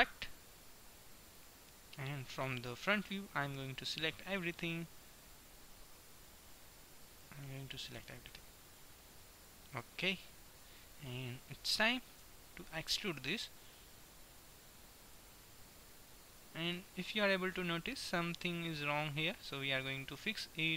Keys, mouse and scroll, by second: 1.8 middle click, 2.7 KP_1, 5.2-7.0 drag, 7.2-9.0 drag, 8.0 b, 9.2 middle click, 11.8 middle click, 12.2 KP_1, 13.8 e, 15.7 middle click, 17.2-19.7 middle drag.